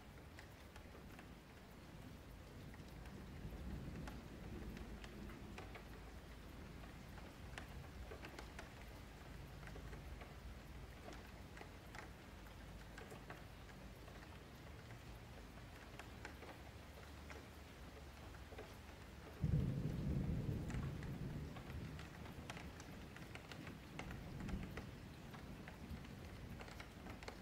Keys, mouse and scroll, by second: 0.3-0.9 middle drag, 0.9-1.3 scroll up 3, 1.3-1.9 shift+middle drag, 1.9 click, 2.5 click, 3.5 Tab, 4.0 F3, 4.5 1, 4.7 click, 7.2 F3, 8.1 click, 11.7 ctrl+z, 12.3 ctrl+shift+z, 12.7 ctrl+shift+z, 13.5 click, 18.7-19.2 scroll down 1, 19.2 middle click, 19.4 Tab, 19.7-20.5 middle drag, 20.5-21.3 scroll up 2, 21.3 scroll down 4, 21.5-22.9 middle drag, 22.9 click, 24.4-25.9 drag, 25.9 scroll down 4, 26.2-27.4 middle drag.